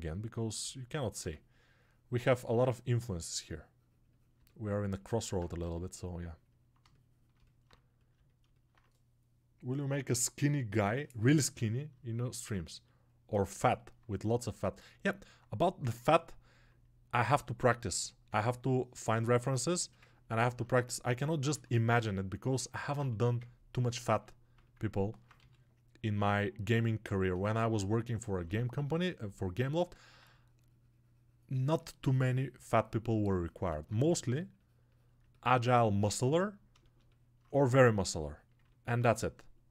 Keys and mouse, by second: 2.3-22.7 alt+drag, 27.0-39.7 alt+shift+drag.